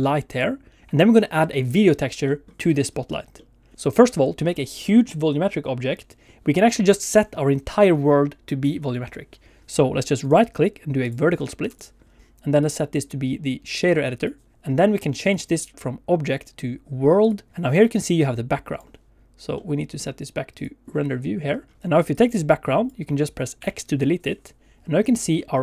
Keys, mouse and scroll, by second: 0.8 Escape, 10.2 right click, 11.7 click, 12.6 click, 17.5 click, 17.6 scroll up 2, 17.8 middle click, 18.2 click, 19.5 middle click, 20.7 click, 21.5 scroll up 1, 21.7 shift+middle click, 22.1 click, 23.6 x, 25.3 middle click.